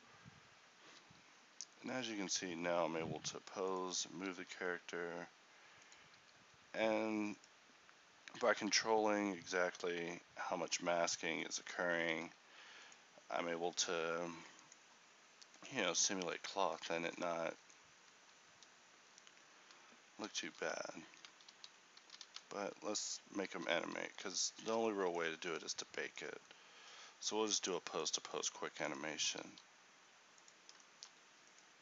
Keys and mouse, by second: 0.8-4.8 drag, 1.5 r, 2.6 g, 4.8 r, 6.6 g, 8.8 r, 12.6 r, 14.4 r, 18.8 Escape, 20.4 r, 21.6 alt+r, 22.1 a, 23.2 alt+g, 23.2 a, 23.6 alt+r, 26.8 a, 29.4 r.